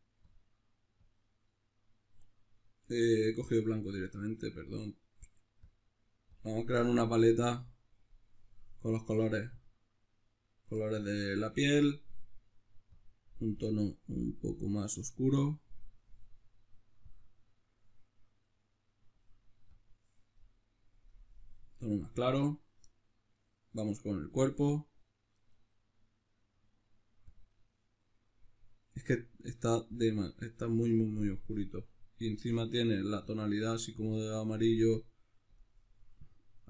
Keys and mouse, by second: 1.0 click.